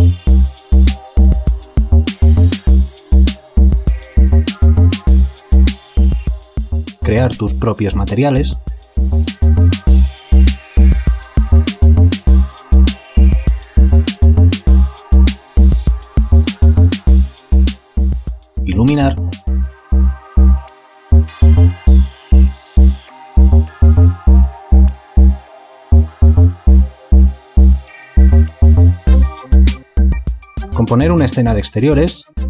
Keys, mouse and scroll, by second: 7.0 alt+click, 9.7 ctrl+alt+click, 10.2 shift+click, 11.1 shift+click, 15.1 alt+click, 15.5 ctrl+alt+click, 27.5 5, 27.6 Return, 31.5 shift+click.